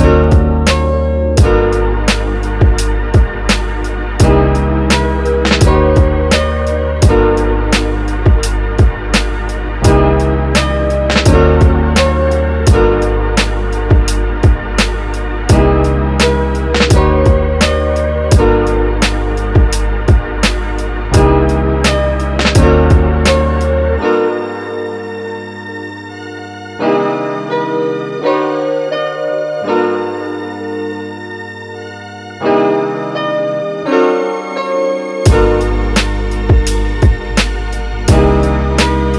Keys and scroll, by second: 9.1 super+s, 9.5 Right, 9.8 BackSpace, 10.0 4, 10.1 Return, 29.1 super+z.